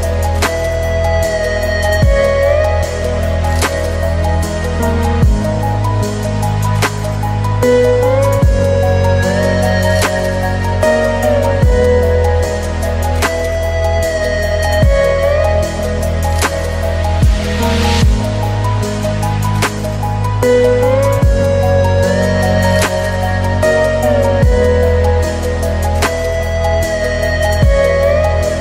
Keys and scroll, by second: 8.0 ctrl+space, 22.2 ctrl+alt+space, 23.8 ctrl+t.